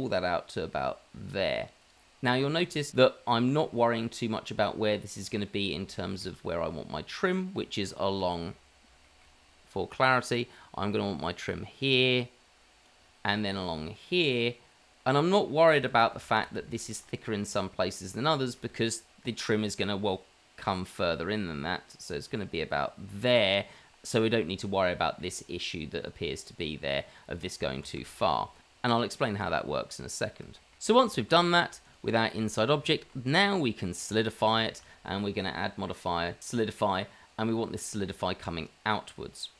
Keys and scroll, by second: 16.4 ctrl+z, 16.8 ctrl+z, 18.6 ctrl+z, 28.2 ctrl+z, 29.0 ctrl+z, 29.4 Tab, 29.9 Tab, 30.1 Tab, 31.5 Tab, 31.5 shift+z, 32.4 shift+z, 33.1 shift+z.